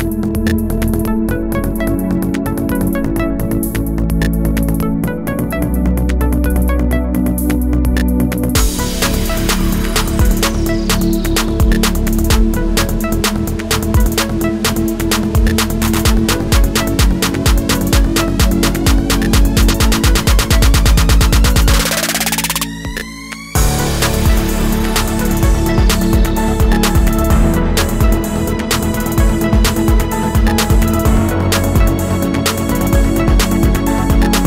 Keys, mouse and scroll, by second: 1.6 alt+scroll up 1, 3.0 alt+scroll up 1, 5.6 alt+click, 8.2 alt+shift+click, 9.9 ctrl+shift+a, 10.3 alt+scroll down 1, 10.5 space, 11.4 alt+click, 13.5 alt+scroll up 1, 15.0 alt+shift+click, 16.0 ctrl+shift+a, 16.4 alt+scroll down 1, 16.5 space, 18.6 alt+click, 22.4 alt+shift+click, 23.2 ctrl+shift+a, 23.5 alt+scroll down 1, 23.8 space, 24.8 alt+scroll down 1, 24.9 space.